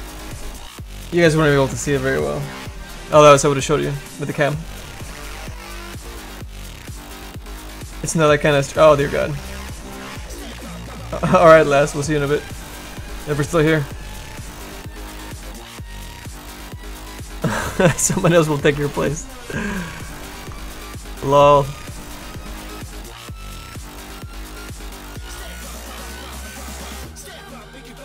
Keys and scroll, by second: 24.6 z, 25.0 s.